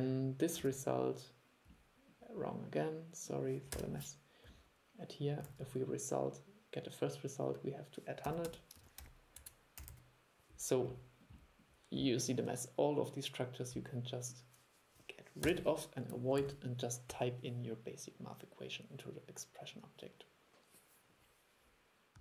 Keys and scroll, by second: 0.7 super+1, 5.6 super+1, 16.5 super+e.